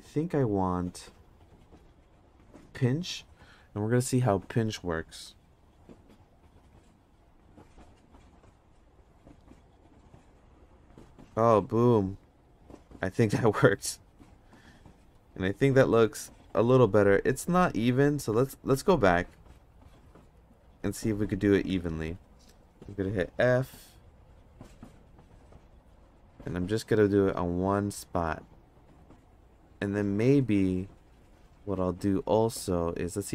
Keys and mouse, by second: 2.7 click, 5.8 f, 7.0 click, 7.4 click, 8.1 click, 8.6 click, 9.6 click, 9.9 click, 10.5 click, 13.2 ctrl+Tab, 18.3 ctrl+z, 18.7 ctrl+z, 19.0 ctrl+z, 19.2 ctrl+z, 19.5 ctrl+z, 19.9 ctrl+z, 20.4 ctrl+z, 20.8 ctrl+z, 21.2 ctrl+z, 24.6 f, 28.5 d, 29.1 f.